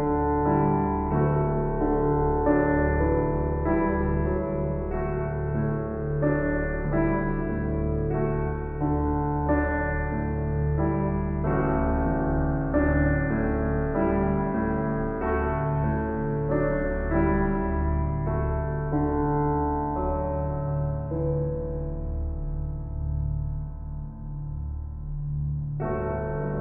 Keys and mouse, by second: 2.7 shift+s, 3.9 Escape, 5.3 shift+d, 5.7 Return, 6.7 s, 7.6-12.4 drag, 12.6 shift+click, 13.6 click, 15.2 click, 16.6 click, 17.3-18.7 drag, 19.0 click, 20.0-21.0 typing, 21.2 Return, 23.1-25.8 drag, 25.6-26.3 typing, 26.3-26.6 drag.